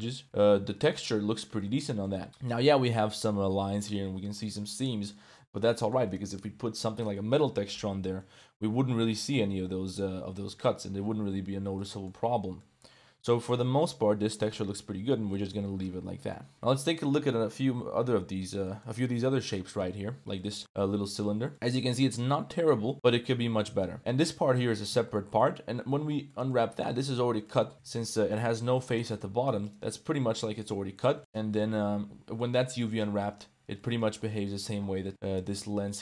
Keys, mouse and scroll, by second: 0.2 Tab, 0.2 KP_Decimal, 0.6 Tab, 1.0 drag, 1.1 middle click, 1.6-2.0 middle drag, 2.0 click, 2.1 click, 3.5 middle click, 4.5 click, 4.6-5.1 middle drag, 5.5-5.9 middle drag, 7.1 middle click, 7.8-8.2 middle drag, 10.5 middle drag, 11.1 ctrl+s, 11.7-12.0 middle drag, 12.6 middle click, 13.2 a, 13.3 a, 13.4 middle click, 13.7 ctrl+s, 14.4-14.7 middle drag, 15.3 middle click, 16.1 shift+middle click, 16.5 Tab, 16.5 a, 17.3 l, 18.2 l, 18.6 middle click, 19.7 KP_Decimal, 20.4 click, 20.6 Tab, 20.6-21.2 drag, 21.5 ctrl+s, 21.9-22.3 drag, 22.7-23.2 drag, 23.6 drag, 24.0 Tab, 24.0 1, 24.2 z, 24.8 z, 24.9 shift+click, 25.4 click, 26.2 click, 27.0-28.8 typing, 27.4 click, 29.9 g, 31.0 shift+click, 31.5 KP_Decimal, 32.3 middle click, 32.6 Tab, 33.0 middle click, 33.8 middle click, 34.5 middle click, 35.8 middle click.